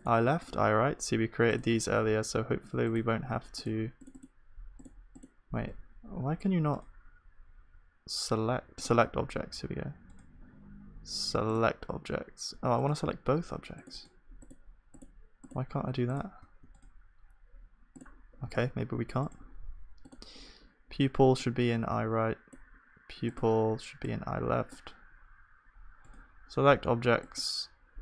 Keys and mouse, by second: 0.0-8.8 drag, 5.8 s, 16.0-18.5 drag, 16.0-18.7 right drag, 18.5 g, 21.9-28.0 right drag.